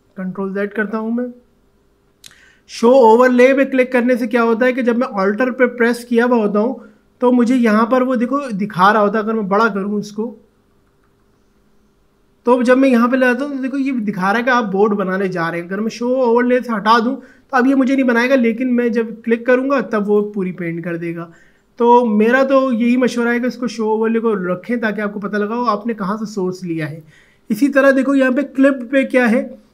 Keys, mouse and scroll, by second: 0.3 ctrl+z, 1.4 alt+scroll down 1, 5.8 alt+click, 10.7-11.3 typing, 15.7 click, 16.7 click, 18.5-21.8 drag, 21.8 ctrl+z, 23.3 click.